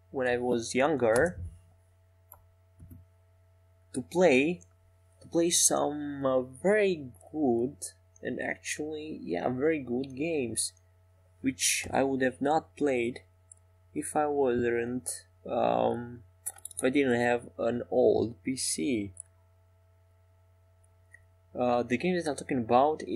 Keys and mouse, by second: 0.9-2.7 right drag, 3.2-4.9 middle drag, 4.9 ctrl+r, 12.9-15.9 drag, 12.9-16.8 right drag, 16.4-17.4 middle drag, 17.4 e, 20.0 g, 20.7 s.